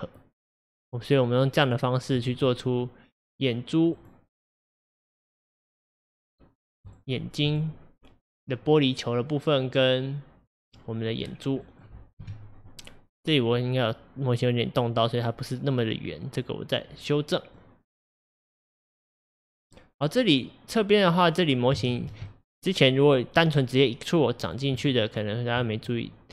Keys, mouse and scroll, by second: 2.2 click, 4.0 click, 4.5 click, 5.8-6.2 scroll down 3, 6.2-6.9 middle drag, 6.9 drag, 7.3 scroll up 2, 7.5 click, 10.5 drag, 11.3 scroll down 4, 11.7 middle click, 12.3 KP_1, 13.1 scroll up 5, 16.9-17.6 scroll down 5, 17.6-21.3 middle drag, 21.3-21.8 scroll up 3, 21.8-24.5 shift+middle drag, 24.5 click, 24.8 Tab.